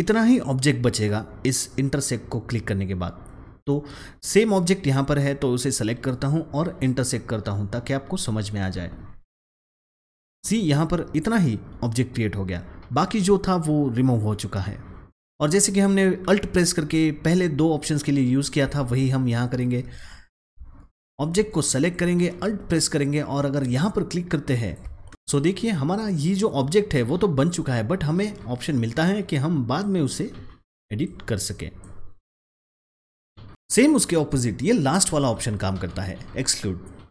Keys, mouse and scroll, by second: 5.2-9.6 drag, 18.4 click, 18.6 ctrl+z, 21.4 click, 21.6-24.6 drag, 29.9 click, 30.0 double click, 30.6 click, 32.5 double click.